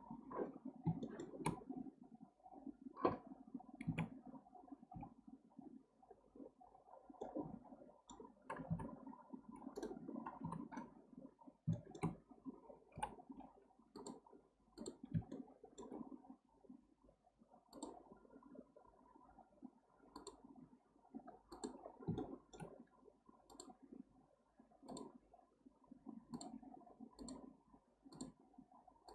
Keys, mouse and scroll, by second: 0.5-1.0 scroll up 1, 1.0-1.6 shift+middle drag, 1.6-2.1 scroll down 1, 3.8 Tab, 4.9 k, 6.5-7.2 scroll up 4, 7.2-9.8 middle drag, 10.4 KP_7, 11.0-11.4 scroll up 1, 11.4 scroll down 2, 11.7-12.9 shift+scroll up 2, 11.7-12.1 shift+middle drag, 12.9 k, 15.3-18.3 shift+middle drag, 21.8-22.2 scroll down 2, 22.2-25.2 shift+middle drag.